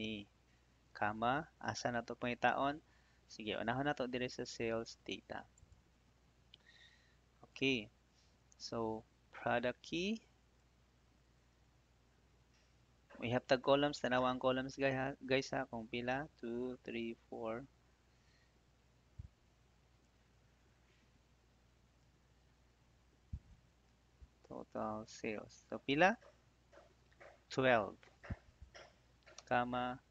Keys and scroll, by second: 0.8 /, 29.3 /.